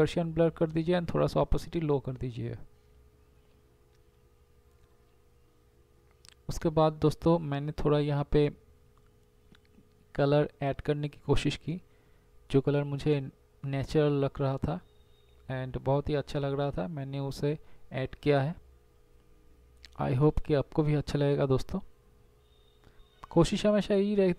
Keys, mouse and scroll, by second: 0.4 ctrl+alt+shift+e, 1.2 z, 2.4 ctrl+j.